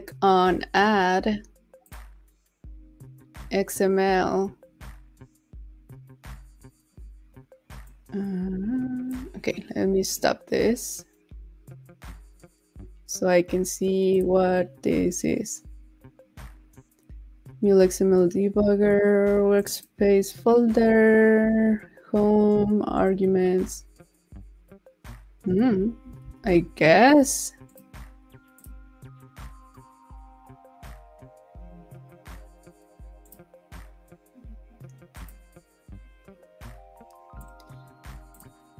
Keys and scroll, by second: 26.2 super+s.